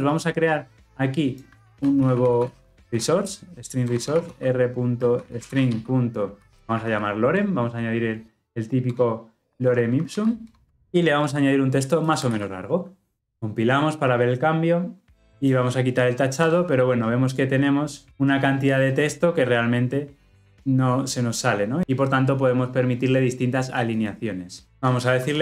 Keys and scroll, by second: 3.9 Return, 10.4 alt+Return, 12.2 ctrl+v.